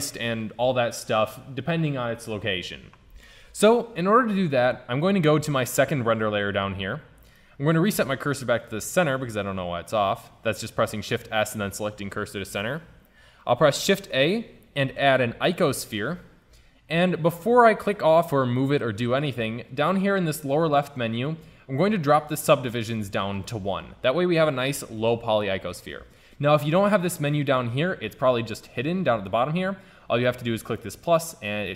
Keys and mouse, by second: 5.1-6.9 drag, 8.0 shift+s, 13.8 shift+a, 21.1 click, 23.4 click, 26.3-26.7 drag, 28.3-30.2 drag, 30.8-31.7 drag.